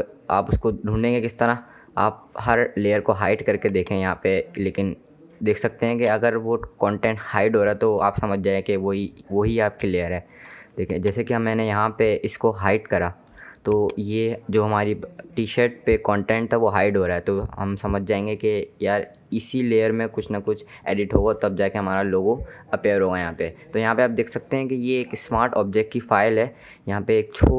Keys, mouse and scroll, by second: 3.3 click, 10.5 click, 13.3 click, 25.1 ctrl+Num_Lock, 25.4 KP_3.